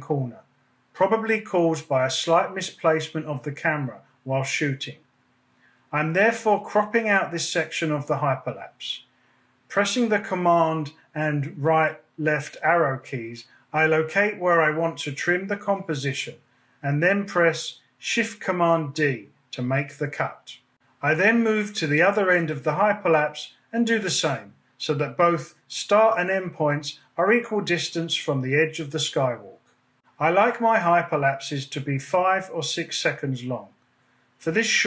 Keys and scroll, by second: 0.1 space, 9.7 super+Right, 10.5 super+Left, 14.3 shift+super+d, 15.7 BackSpace, 29.3 shift+super+d, 29.8 BackSpace.